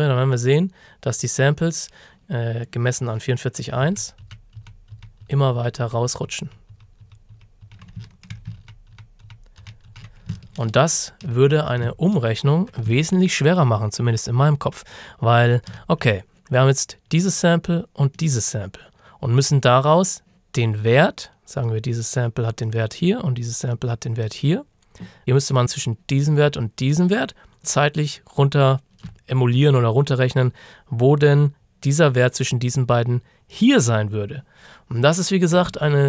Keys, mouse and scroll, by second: 3.9 ctrl+d, 8.2-8.5 ctrl+shift+scroll down 2, 8.6 ctrl+d, 10.7-11.9 ctrl+scroll up 3, 12.0-12.6 ctrl+shift+scroll up 2, 13.6-14.0 ctrl+shift+scroll down 1, 14.9-15.3 ctrl+shift+scroll up 1, 17.2 click, 21.7 click.